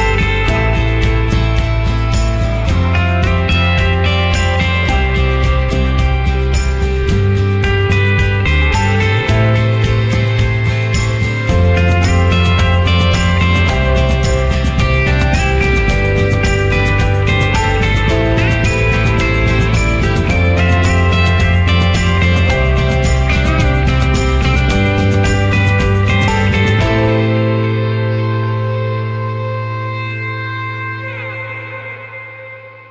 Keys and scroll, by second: 6.2 ctrl+e.